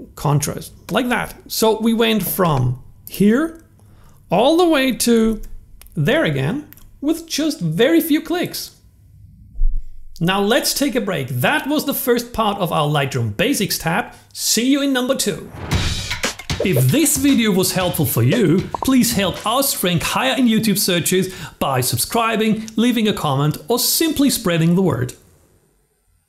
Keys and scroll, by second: 4.3 super+z.